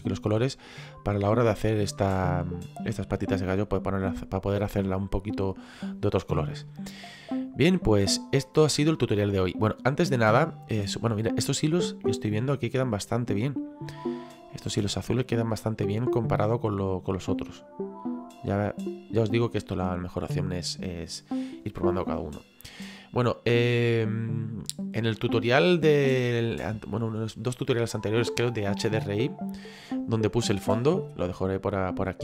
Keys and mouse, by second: 2.0 middle click, 6.6 middle click, 8.5 click, 9.9 middle click, 12.2 middle click, 17.4 click, 24.0 middle click.